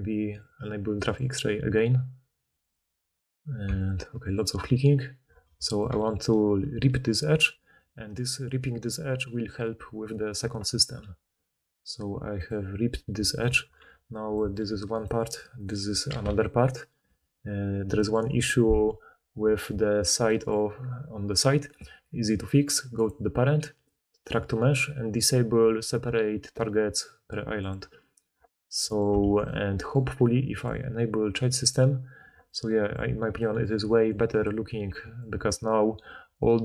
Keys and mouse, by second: 11.0 v, 13.8 4, 14.7 g, 15.5 click, 15.8 4, 16.0 g, 17.0 Tab, 20.6-23.0 drag, 23.0-27.6 middle drag, 27.6-28.4 drag, 28.4-30.5 middle drag, 29.2 alt+a, 30.5-31.8 drag, 31.8-34.0 middle drag, 33.8-36.6 typing, 34.0-36.6 drag, 35.9-36.6 middle drag, 35.9-36.6 right drag.